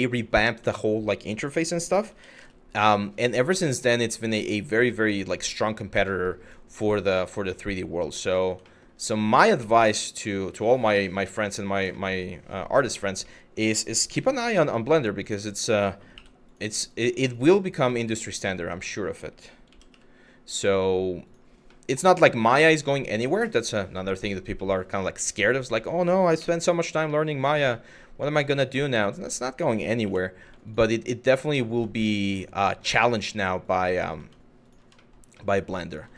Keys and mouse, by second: 0.4 shift+middle click, 1.7 g, 2.0 y, 4.0 click, 4.5 middle click, 5.2 Tab, 5.7 middle drag, 6.1 click, 6.5 middle drag, 7.2-7.6 middle drag, 8.0 click, 8.3 shift+middle drag, 8.8-9.6 middle drag, 9.9-11.3 middle drag, 11.7-12.6 middle drag, 13.0 middle click, 13.8 Tab, 14.3 middle click, 15.1 click, 15.8 2, 17.2 click, 17.6 middle click, 19.3 g, 19.5 y, 20.9 click, 21.4 middle click, 22.6 middle click, 23.2 middle click, 24.2 shift+middle click, 24.9 Tab, 26.0 KP_Divide, 26.8 middle drag, 27.4 shift+middle drag, 27.9 middle drag, 28.7 Tab, 29.6 Tab, 30.3 alt+click, 31.5 shift+click, 32.4 middle click, 32.9 shift+click, 33.2 shift+click, 33.7 shift+middle click, 34.7 shift+middle click, 35.1 shift+middle click, 35.5 shift+click, 35.9 shift+middle click.